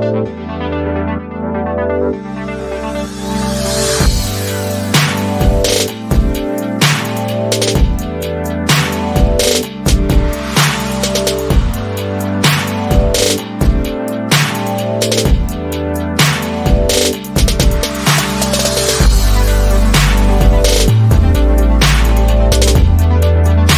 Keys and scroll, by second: 4.0 ctrl+z, 7.9 ctrl+c, 8.1 ctrl+v, 12.5 ctrl+a, 13.6-16.2 typing, 17.4 Left, 17.6 Left, 18.3 Left, 19.0 BackSpace, 19.1 Return, 21.8 Right, 22.0 Right, 22.4 Up, 23.0 Up.